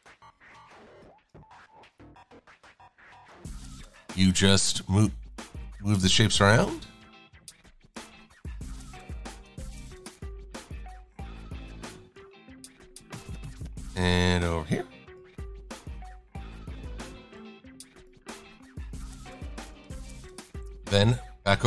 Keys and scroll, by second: 1.6 v, 19.7 v.